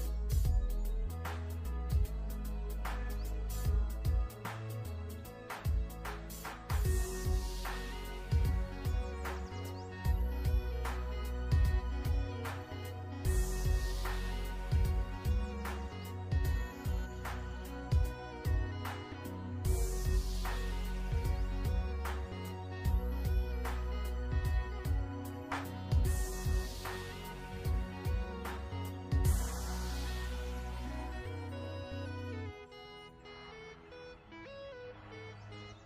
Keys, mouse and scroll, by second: 0.5 v, 0.8 click, 1.5 alt+shift+scroll up 1, 2.0 alt+shift+scroll down 2, 2.3-3.0 ctrl+scroll up 2, 3.0 click, 4.8 click, 7.0-8.7 scroll up 1, 18.2 n, 18.8 click, 20.9 v, 22.0 click, 25.9 v, 26.1 click, 27.8 shift+click, 28.7 ctrl+scroll down 1, 29.9 click, 30.9 ctrl+z, 31.9 click, 33.6 click, 34.2 ctrl+z, 34.7 click.